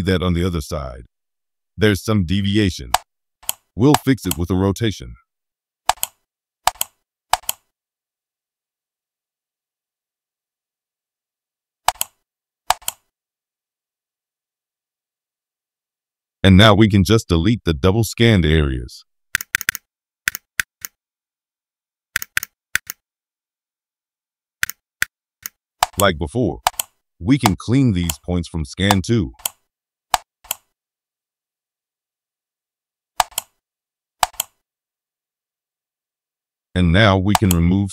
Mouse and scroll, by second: 0.4-0.7 scroll up 2, 1.9-2.6 scroll down 4, 2.9 middle click, 3.9 middle click, 4.5 scroll up 1, 4.9 middle click, 5.8 right click, 6.6 click, 7.3 click, 7.7-8.0 scroll down 1, 8.1 scroll up 1, 8.4 scroll down 1, 9.4 middle click, 9.8 middle click, 10.1 middle click, 10.4 middle click, 10.8 middle click, 11.8 click, 12.6 click, 14.2-14.5 scroll down 1, 15.3-15.6 scroll down 1, 15.9-16.2 scroll up 1, 16.6-18.1 scroll down 4, 18.5-18.9 scroll down 1, 19.1 scroll up 1, 19.3 click, 19.5 click, 19.6 click, 20.2 click, 20.6 right click, 22.1 click, 22.3 click, 22.7 right click, 24.6 right click, 25.0 click, 25.8 right click, 26.6 click, 27.4 right click, 28.8 right click, 30.1 right click, 33.1 right click, 34.2 click, 37.3 click.